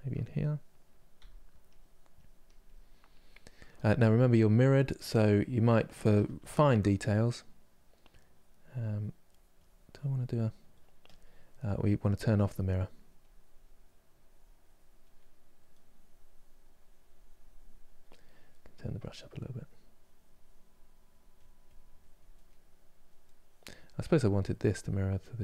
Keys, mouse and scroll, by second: 0.9 f, 1.8-3.3 drag, 3.3-5.7 middle drag, 5.7 ctrl+z, 6.1 ctrl+z, 6.5-8.0 middle drag, 8.0-10.8 drag, 11.3-14.8 drag, 14.8 middle click, 15.5-22.1 drag, 22.1 middle click, 23.0-25.4 drag.